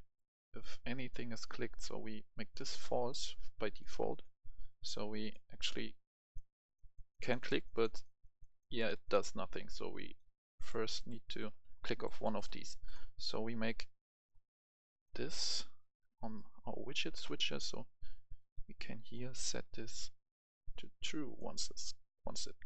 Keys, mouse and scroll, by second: 15.2 right click, 15.6 right click, 17.8-22.6 drag.